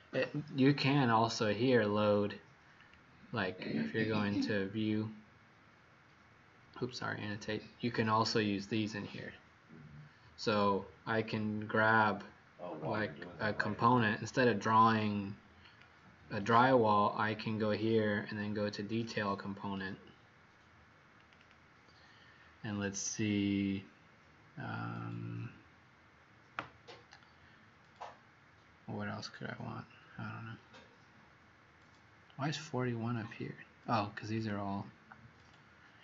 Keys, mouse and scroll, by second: 13.0 click, 16.1 click, 21.3 click, 34.2 click.